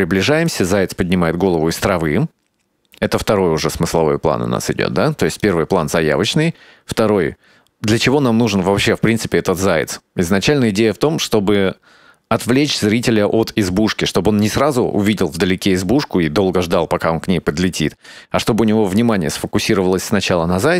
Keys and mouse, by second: 5.5-14.6 drag.